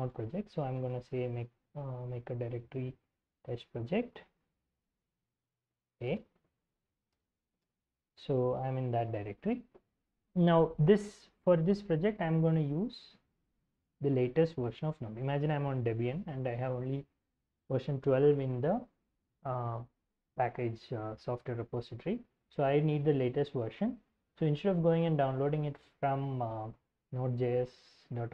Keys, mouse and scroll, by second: 0.0-0.9 typing, 3.1-7.9 typing, 7.1 Return, 8.1 ctrl+l, 24.1 alt+Tab, 24.9 ctrl+Tab, 26.9-27.6 scroll up 1.